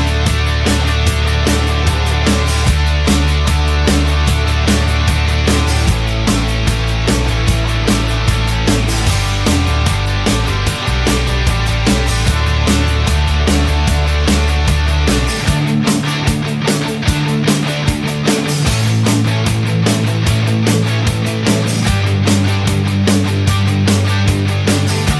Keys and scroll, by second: 0.6 Return, 13.7-14.0 typing.